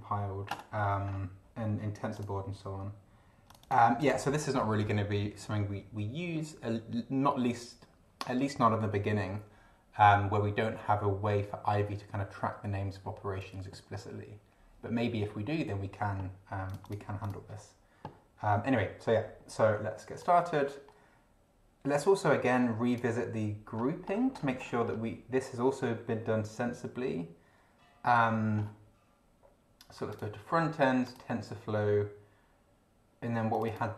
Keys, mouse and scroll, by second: 0.7-1.3 scroll up 4, 2.2 click, 3.5 click, 4.0 click, 16.7 click, 17.2 click, 20.2 click, 20.4-23.1 drag, 23.7 scroll up 2, 24.5-25.0 scroll up 2, 25.0 scroll up 1, 28.5 scroll up 2, 30.1 click, 31.0 click, 33.5 click.